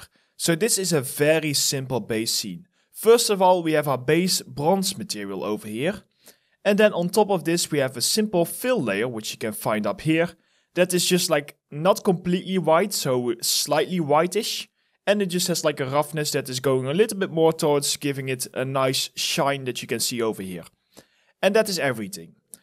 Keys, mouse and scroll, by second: 20.8 alt+middle click, 21.4 alt+right click, 22.0 alt+click.